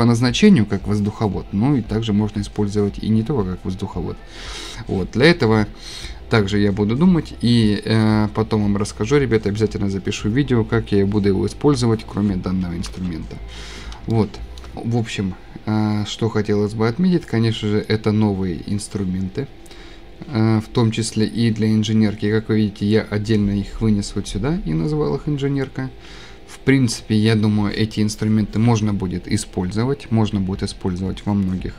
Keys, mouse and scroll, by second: 12.9 Delete, 13.8 scroll, 14.7 Escape, 14.7 click, 18.1-18.8 scroll down 3.